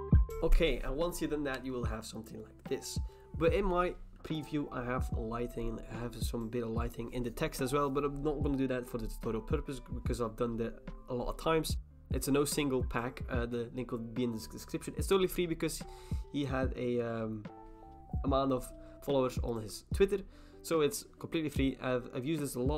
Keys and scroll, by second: 0.0 ctrl+d, 0.3 alt+BackSpace, 0.3 ctrl+d.